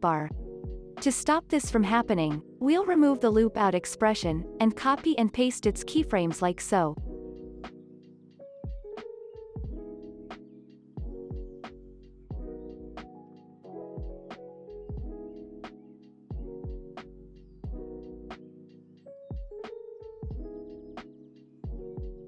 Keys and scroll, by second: 4.9 =, 8.2 z, 11.7 ctrl+c, 15.6 ctrl+v, 18.1 ctrl+v, 20.3 ctrl+v.